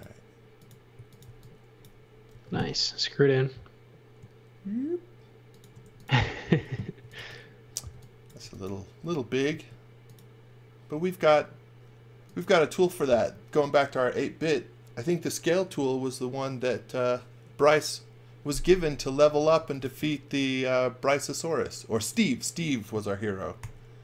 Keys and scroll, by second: 0.9 x, 1.2 v, 2.3 m, 5.6-9.0 typing, 19.3-20.3 typing, 23.6 g.